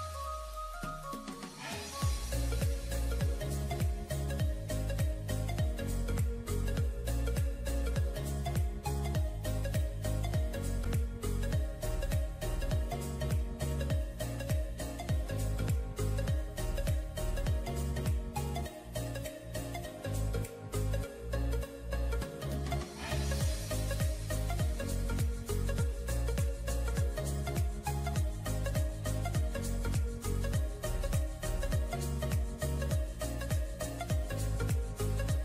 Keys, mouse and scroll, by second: 0.1-0.5 alt+scroll up 1, 3.5-4.0 alt+scroll up 1, 6.2 typing, 8.3 double click, 12.2-12.5 scroll down 2, 12.9 ctrl+click, 19.3 ctrl+click, 19.9 ctrl+e, 21.6 ctrl+e, 22.2 ctrl+j, 23.4 right click, 26.8 alt+w, 27.2-27.8 scroll up 2, 28.8-29.3 alt+scroll down 1, 31.2 ctrl+x.